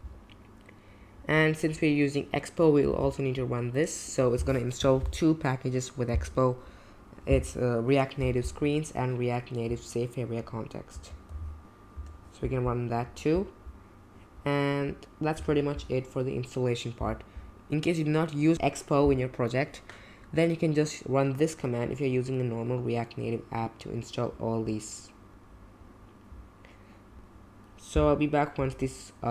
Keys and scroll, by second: 2.9 super+c, 11.1 super+v, 12.0 Return, 14.0 Return.